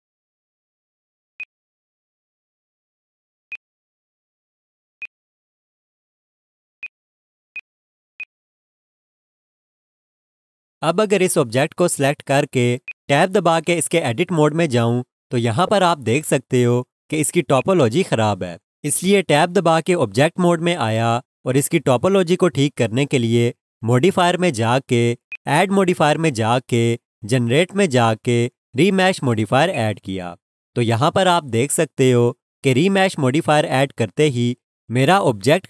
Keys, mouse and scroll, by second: 8.0 click, 8.2 alt+click, 12.8 click, 15.5-15.9 scroll up 1, 16.1 alt+shift+click, 17.4 scroll, 17.5 alt+shift+click, 25.3 click, 29.7 click.